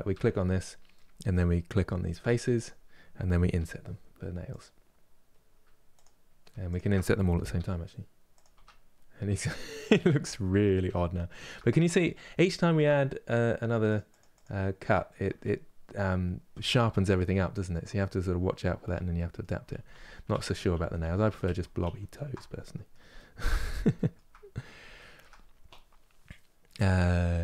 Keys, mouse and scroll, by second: 0.8-2.0 middle drag, 2.0 3, 2.3 click, 3.3 i, 5.7 click, 6.4 shift+click, 7.3 i, 8.7-9.1 scroll down 1, 9.1-10.6 middle drag, 10.6 Tab, 11.0 shift+middle click, 11.4-12.0 scroll up 2, 14.8-16.2 middle drag, 16.2 Tab, 16.6-17.4 scroll down 1, 17.4-19.5 middle drag, 19.5 ctrl+z, 19.7 ctrl+z, 22.3-24.2 middle drag, 24.2-24.7 scroll up 2, 24.7-27.4 shift+middle drag.